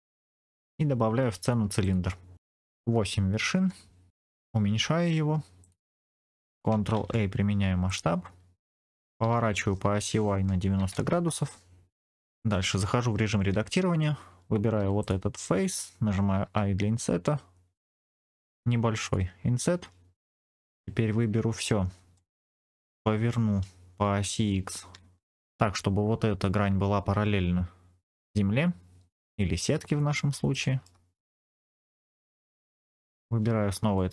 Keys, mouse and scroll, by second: 2.3-3.6 drag, 4.1-4.5 scroll down 3, 4.5 s, 5.5 click, 6.8 ctrl+a, 9.2 r, 9.7 y, 10.7 KP_9, 10.9 KP_0, 11.2 KP_Enter, 12.1 shift+middle click, 12.1 scroll up 4, 13.4 Tab, 14.7 3, 14.9 click, 16.3 i, 18.9 click, 20.6 KP_3, 21.3-21.8 scroll up 2, 22.0 shift+middle click, 22.8 r, 25.2 click, 29.8-30.5 scroll up 1, 30.5 shift+middle click, 31.1-31.4 scroll up 3, 31.4 shift+middle click, 31.8 scroll down 4, 32.0 middle click, 32.8 click, 33.8 middle click.